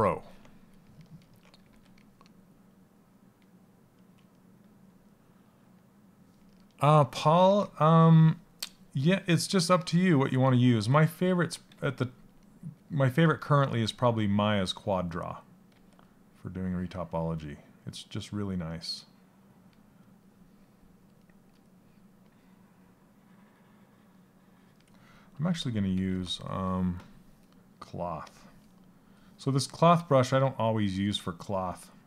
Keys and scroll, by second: 1.1 s, 7.0 s, 10.2 a, 11.2 a, 25.0 ctrl+z, 25.5 ctrl+z.